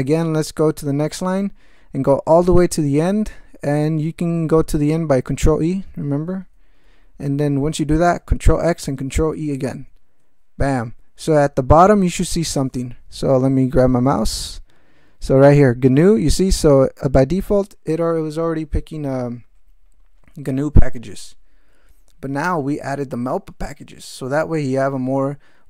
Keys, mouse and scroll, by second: 6.1 ctrl+e, 8.9 ctrl+x, 9.7 ctrl+e.